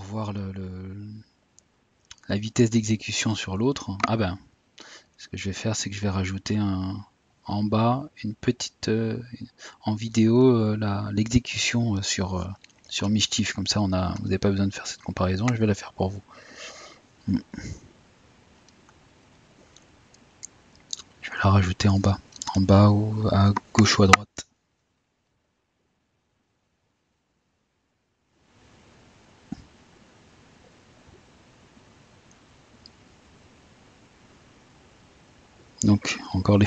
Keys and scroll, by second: 0.5 typing, 30.7 typing.